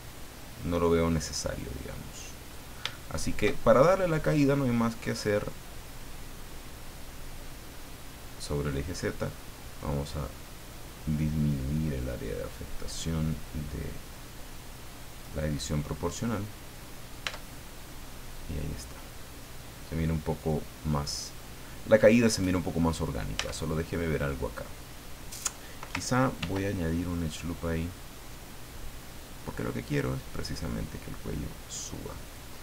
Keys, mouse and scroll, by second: 2.1 middle click, 3.0-5.2 shift+middle drag, 8.7 click, 9.3-11.4 scroll up 8, 12.3 scroll up 2, 12.6 scroll down 2, 15.5-17.2 middle drag, 17.2 Tab, 17.6-21.5 middle drag, 23.0 right click, 23.2-24.7 middle drag, 23.4 Tab, 26.4 ctrl+r, 27.3 click, 32.2 click.